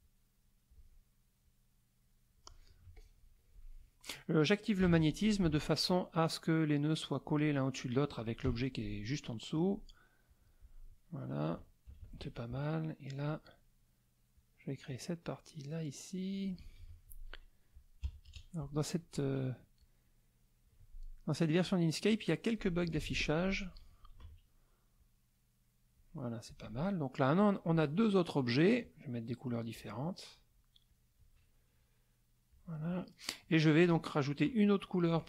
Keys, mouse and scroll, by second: 0.0 click, 1.4-2.4 drag, 2.9 z, 3.0 click, 3.7 middle click, 5.5 F2, 6.1-7.5 drag, 8.5 F6, 9.5 click, 10.3 click, 11.9 KP_Subtract, 12.6 middle click, 14.4-16.5 drag, 16.8 F2, 18.0 KP_Subtract, 18.3 KP_Add, 19.8-20.8 drag, 21.6 click, 24.2 ctrl+a, 25.0-26.1 drag, 26.5 click, 29.7 click, 30.9 click, 32.5 click.